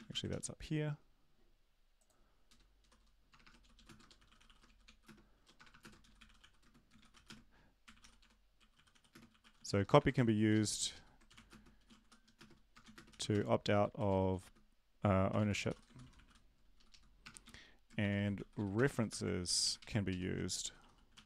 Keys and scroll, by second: 0.3 ctrl+x, 2.5 Return, 4.0-10.1 typing, 10.7 ctrl+Left, 11.6-12.3 typing, 12.8 ctrl+Left, 13.1 ctrl+Left, 13.2 ctrl+Left, 13.5-17.2 typing, 16.7 Left, 16.9 Left, 17.4 End, 18.0 shift+Home, 18.3 ctrl+c, 18.5 End, 18.6-19.9 typing, 20.1 ctrl+Right, 21.1 ctrl+shift+Right.